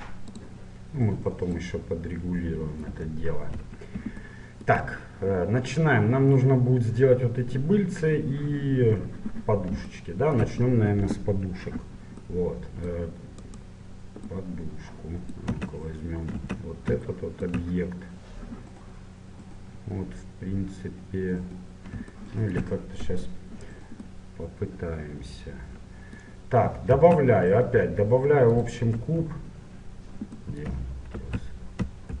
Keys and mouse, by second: 1.6-3.3 drag, 3.1 KP_1, 3.8-6.3 middle drag, 10.0-13.4 middle drag, 13.4-15.0 right drag, 15.7 Tab, 16.4 Tab, 23.0 KP_7, 27.0 shift+a, 29.0 KP_1, 30.2-32.2 drag, 31.2 ctrl+z.